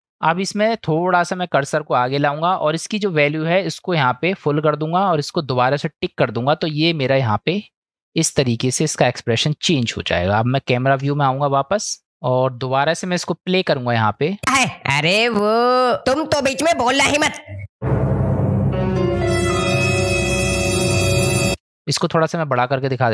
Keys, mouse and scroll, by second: 1.2-2.3 drag, 3.8-4.8 drag, 5.9 click, 7.4-9.8 drag, 11.0 KP_0, 14.1 click, 14.4 space, 21.5 space.